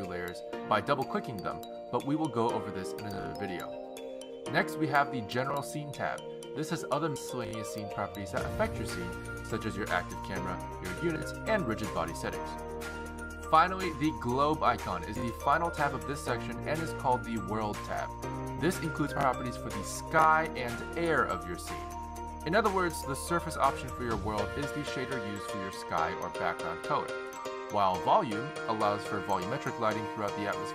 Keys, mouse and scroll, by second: 5.6 click, 7.4 click, 11.1 click, 11.4 click, 13.3 click, 13.9 click, 16.0 click, 29.5 click.